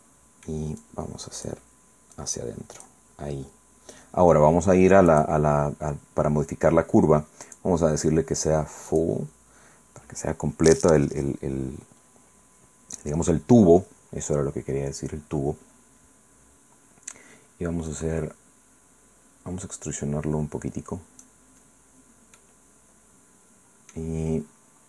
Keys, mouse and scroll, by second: 0.8 click, 2.2 click, 3.2 middle click, 3.6 middle click, 5.1 click, 7.4 click, 8.9 click, 17.9-21.4 drag, 21.7 middle click, 22.4-24.1 drag.